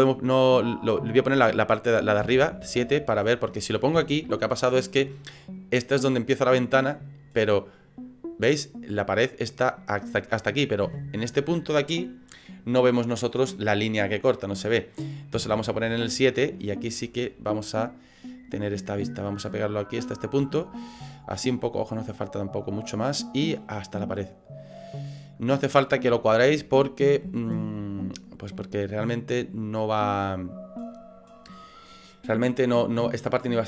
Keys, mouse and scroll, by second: 2.2 KP_7, 4.0 KP_1, 7.7 middle click, 8.1 middle click, 8.9 middle click, 10.8 KP_1, 15.3 KP_7, 16.3 scroll up 4, 17.3 click, 20.5 shift+middle click, 21.1 shift+scroll up 1, 21.4 scroll down 4, 22.6 click, 24.8 middle click, 25.8 scroll up 5, 26.2 shift+middle click, 26.8 middle click, 27.3 shift+middle click, 28.8 click.